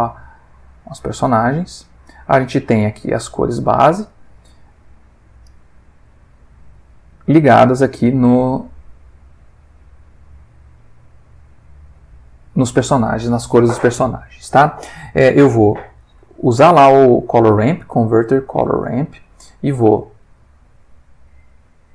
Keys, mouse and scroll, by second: 0.7 click, 1.8 click, 2.5 click, 4.3 middle click, 5.4-6.9 drag, 10.2-12.8 drag, 16.0 shift+a, 18.0 click, 20.5 click, 21.7-21.9 drag.